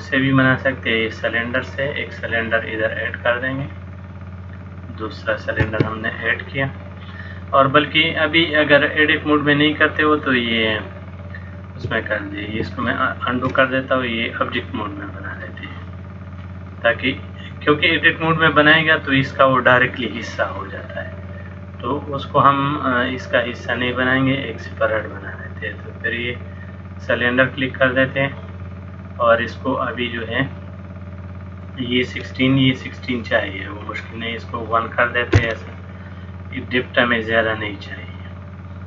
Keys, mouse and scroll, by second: 3.1 middle click, 4.3 click, 12.7 ctrl+z, 14.7 click, 16.3 click, 16.9 middle click, 21.6 click, 34.1 click.